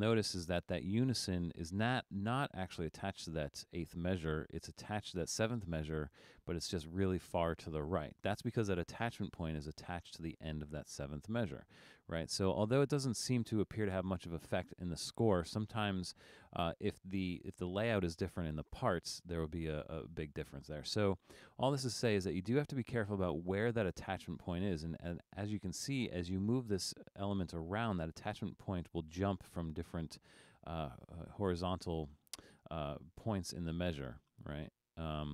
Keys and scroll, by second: 0.1 super+=, 0.6 super+=.